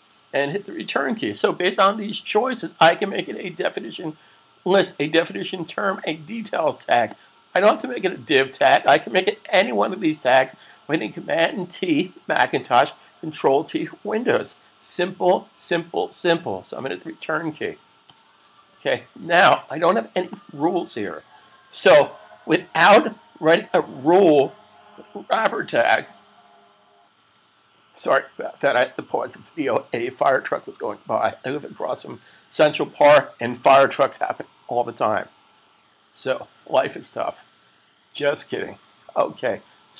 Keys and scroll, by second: 19.3 s.